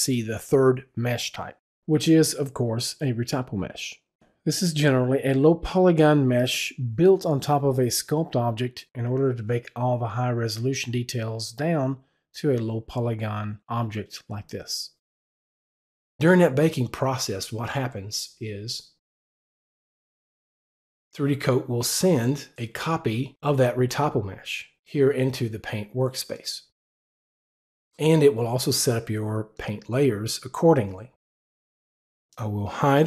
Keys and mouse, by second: 19.0 click, 20.3 click, 27.5 click, 29.5 click, 32.5 click.